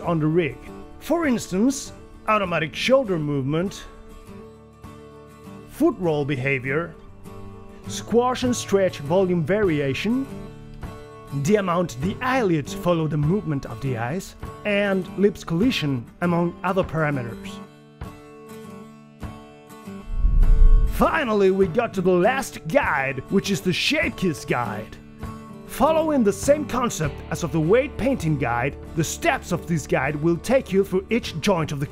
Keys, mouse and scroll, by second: 10.6 click, 18.5 g, 19.5 g.